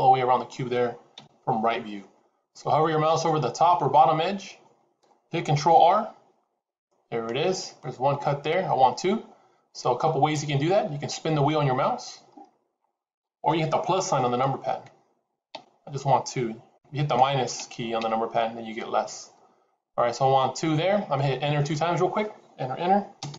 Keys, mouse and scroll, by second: 1.0 KP_3, 5.4 ctrl+r.